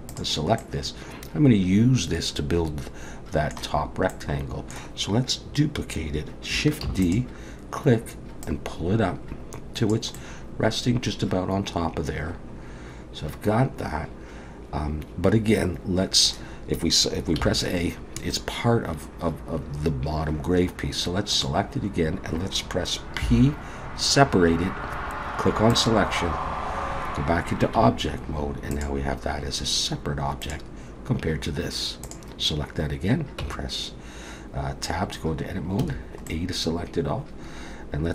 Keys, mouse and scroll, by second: 0.1 click, 0.6 middle click, 4.1 middle click, 6.9 shift+d, 8.4 click, 10.2 middle click, 17.4 a, 21.3 click, 23.2 p, 27.8 Tab, 28.7 click, 30.4 click, 32.0 click, 33.4 Tab, 35.8 a, 36.3 middle click.